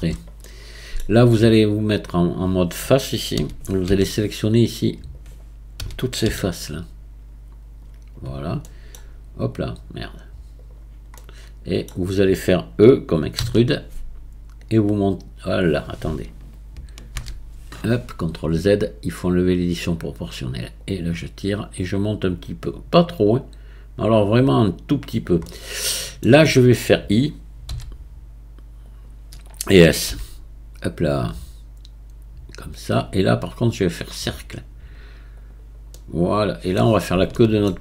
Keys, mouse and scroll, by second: 0.4-2.0 middle drag, 2.0-3.4 drag, 3.4 a, 3.9 c, 5.8 a, 6.5 c, 11.2-13.5 middle drag, 13.5 e, 14.6-17.1 drag, 17.1 ctrl+z, 19.3 click, 20.8-23.9 drag, 25.5-27.8 middle drag, 27.8 i, 31.9 s, 34.3-35.9 right drag, 35.9 middle click, 36.8-37.3 scroll down 1, 37.3 shift+middle click.